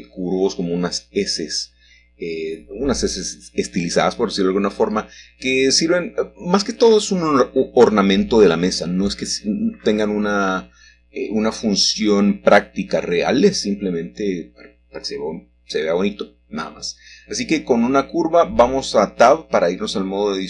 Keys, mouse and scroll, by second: 0.4-0.7 typing, 1.9 -, 2.9 Return, 4.4-5.2 shift+scroll up 1, 4.5 shift+middle click, 6.0 middle click, 6.8 3, 8.4 ctrl+Escape, 11.4 g, 14.1 y, 18.0 click, 18.5 Tab.